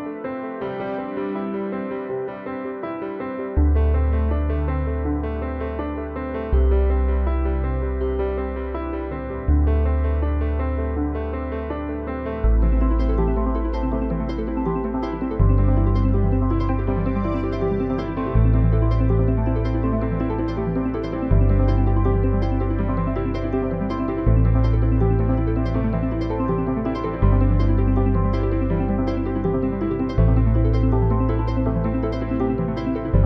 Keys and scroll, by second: 4.8 ctrl+v, 13.6 Return, 31.5 ctrl+t.